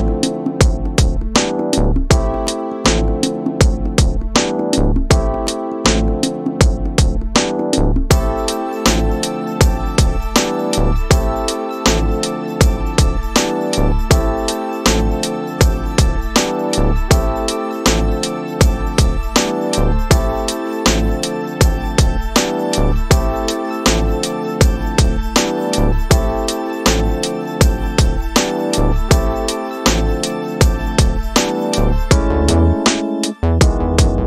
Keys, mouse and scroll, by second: 10.2 click, 11.9 g, 14.5-15.8 drag, 16.6 g, 19.4-27.8 drag, 28.1 space, 33.5 space.